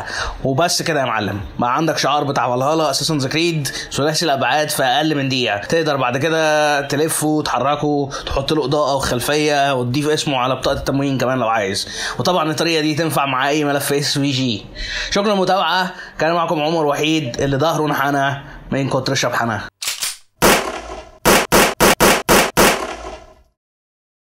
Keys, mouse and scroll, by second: 0.3 middle click, 5.6 middle click, 5.6 click, 5.6 r, 6.3 middle click, 6.7 middle click, 6.7 g, 7.2 shift+middle click, 7.4 click, 7.6 middle click, 7.8-12.7 typing, 8.6 click, 8.7 click, 8.7 click, 9.0 click, 10.1 click, 10.2 middle click, 10.3 click, 10.4 scroll up 4, 10.5 scroll down 2, 10.6 click, 10.8 click, 10.9 middle click, 11.0 middle click, 11.1 scroll up 1, 11.1 click, 11.6 middle click, 11.7 click, 11.9 middle click, 12.0 click, 12.3 middle click, 12.5 middle click, 13.0 middle click, 13.2 click, 13.2 middle click, 13.7 click, 13.9 shift+`, 14.6 click, 14.7 click, 14.8 click, 15.0 click, 15.2 click, 15.5 scroll down 2, 15.6 click, 16.7 scroll down 5, 17.0 click, 17.3 scroll down 3, 17.3 click, 17.5 click, 17.8 click, 17.9 click, 18.1 click, 18.4 scroll down 2, 18.5 click.